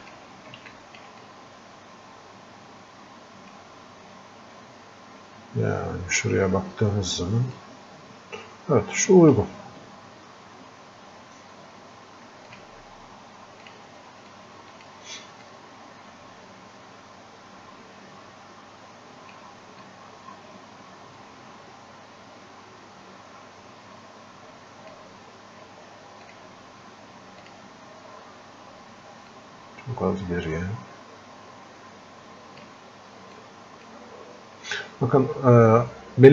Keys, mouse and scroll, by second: 7.6-36.3 drag.